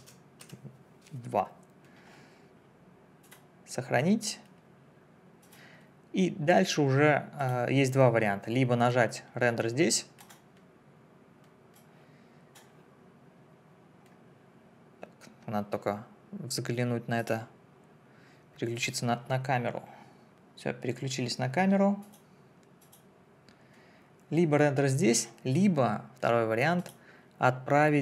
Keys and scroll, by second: 0.4 2.